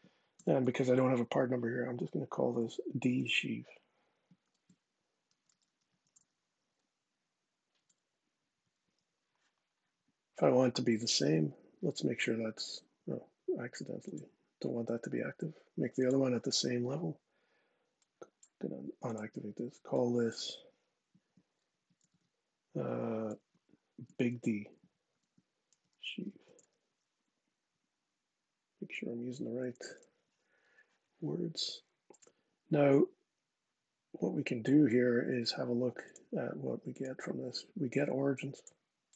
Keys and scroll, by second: 0.1 shift+-, 2.9 d, 4.2-6.5 typing, 7.6 Return, 21.5 Tab, 23.1-26.9 typing, 29.6 Return.